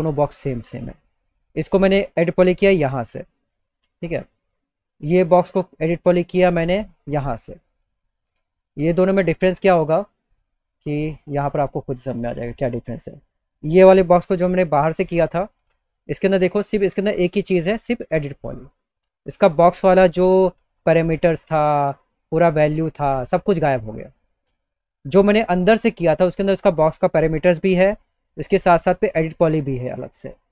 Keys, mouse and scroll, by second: 0.2 click, 0.8 click, 2.5 click, 5.8 click, 6.4-6.8 scroll up 2, 7.2 click, 8.8 e, 9.7 click, 13.1 click, 13.2 right click, 24.6 click, 27.5 click.